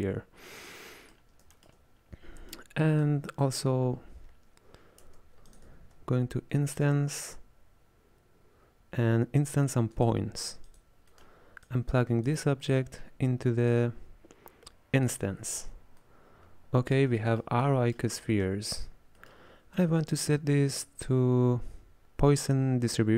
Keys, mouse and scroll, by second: 0.0-3.1 middle drag, 3.1 click, 5.1 space, 5.8 shift+a, 11.2-11.7 middle drag, 11.7 click, 12.7-13.8 middle drag, 13.8 drag, 16.1-18.5 middle drag, 18.5 click, 19.2-20.3 middle drag, 20.3-22.8 drag.